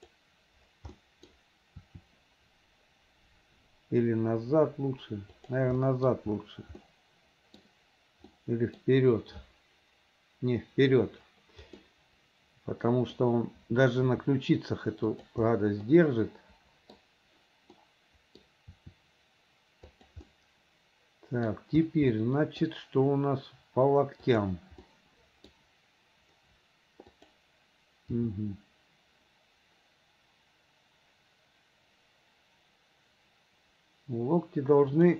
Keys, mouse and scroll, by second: 0.0 click, 1.0 middle click, 2.8 r, 5.8-6.6 middle drag, 6.8-7.6 middle drag, 8.3-8.9 middle drag, 11.9-13.2 middle drag, 15.5 r, 16.0-17.0 middle drag, 17.8-18.4 middle drag, 20.2 r, 20.3-21.5 middle drag, 21.9 click, 22.2 middle click, 24.9 middle click, 27.1 click, 28.1 g.